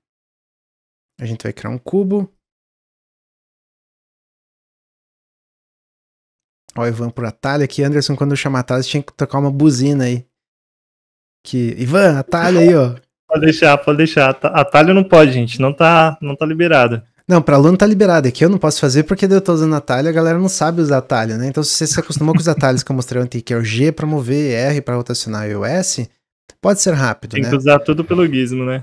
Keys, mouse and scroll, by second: 1.6 s, 3.1 click, 4.3 s, 6.0-7.1 middle drag, 7.1 click, 7.7 middle click, 8.5 click, 9.4 middle click, 10.4 click, 11.3-12.3 middle drag, 12.3-13.4 drag, 13.4-14.7 middle drag, 14.7-15.7 drag, 16.8-19.9 middle drag, 20.7-23.8 middle drag, 25.8-28.8 middle drag.